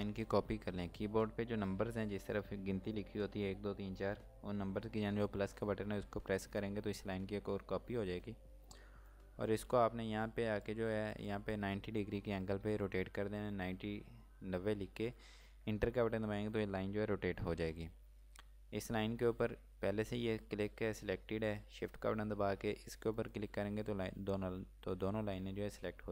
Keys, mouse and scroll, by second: 6.1 space, 6.4 KP_Add, 8.8 KP_Add, 12.6 KP_9, 15.6 KP_Enter, 18.4-20.5 scroll down 1, 20.6 scroll up 1, 23.1 click.